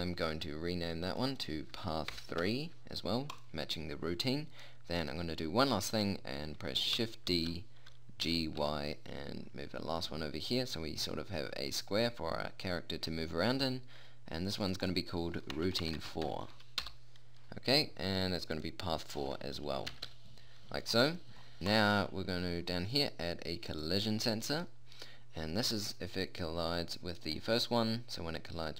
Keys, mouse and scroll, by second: 1.6-3.3 drag, 7.8 shift+d, 15.0-17.3 drag, 16.2 BackSpace, 19.1-20.4 drag, 21.6-23.8 drag, 23.9 click, 28.2-28.7 drag.